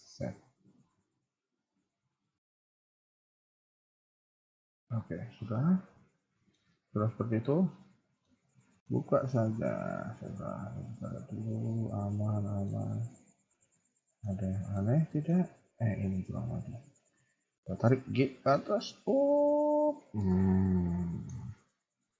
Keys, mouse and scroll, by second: 2.1 r, 3.7 g, 5.0-5.4 scroll down 3, 5.3 middle click, 6.6 KP_1, 6.9 scroll down 3, 7.1 Tab, 7.5 middle click, 8.3-8.8 scroll up 5, 8.8 middle click, 13.1 middle click, 14.6 shift+middle click, 14.8 middle click, 15.6 Tab, 16.5 click, 17.6 g, 20.2 middle click, 21.3 KP_1, 21.7 Tab, 22.0 middle click.